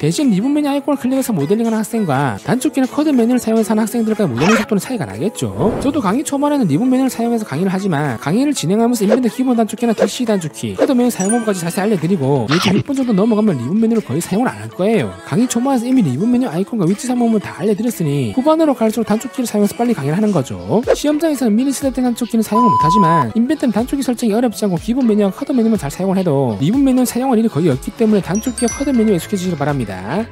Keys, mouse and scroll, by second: 1.0 click, 3.6 click, 4.9 click, 5.8 Tab, 6.3-7.0 scroll up 6, 7.0 q, 7.2 click, 7.5 click, 7.9 click, 8.1 click, 8.3 click, 8.6 click, 10.3 click, 10.7 c, 11.1 click, 12.3 click, 13.3 click, 14.2 click, 14.8 shift+click, 15.5 click, 16.6 click, 16.9 click, 17.5 click, 17.8 click, 18.0 scroll up 2, 18.4 click, 18.7 click, 18.9 d, 19.0 click, 19.2 click, 19.6 click, 20.3 click, 20.6 right click, 20.9 click, 21.5 click, 21.7 click, 22.0 click, 22.3 click, 22.6 click, 23.0 click, 23.5 click, 23.7 click, 23.9 click, 24.1 ctrl+right click, 24.6 click, 24.8 click, 25.1 click, 25.6 click, 27.0 click, 27.4 click, 27.7 click, 28.1 click, 28.3 click, 28.7 click, 28.9 click, 29.1 click, 29.6 click.